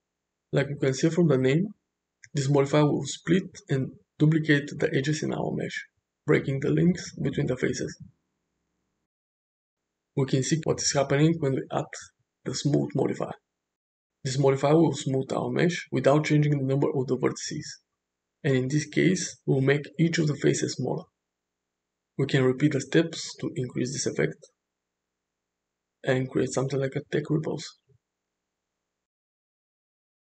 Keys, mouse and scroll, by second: 0.6 click, 1.3 middle click, 4.1 click, 6.5 click, 6.9-7.8 middle drag, 8.4 middle click, 9.4 middle click, 12.0-15.4 drag, 16.3-16.6 middle drag, 17.3 shift+middle click, 18.3 click, 19.0-20.3 middle drag, 21.4-22.0 shift+middle drag, 26.9-27.5 middle drag, 27.7 space, 27.9-29.6 middle drag, 30.2 shift+middle drag.